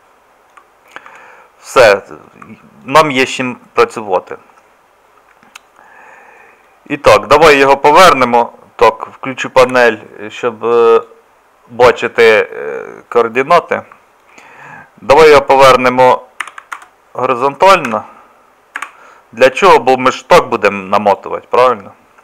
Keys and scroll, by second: 1.1 Tab, 9.7 n, 16.4 r.